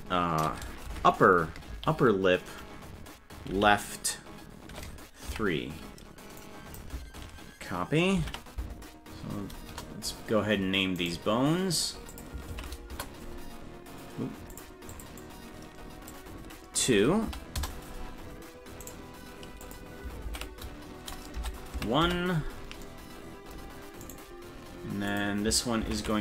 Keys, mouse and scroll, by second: 11.0 right click, 12.1-13.3 drag, 14.5-17.9 drag, 18.9 right click, 19.6-22.3 drag, 24.1 right click, 25.1-26.2 drag.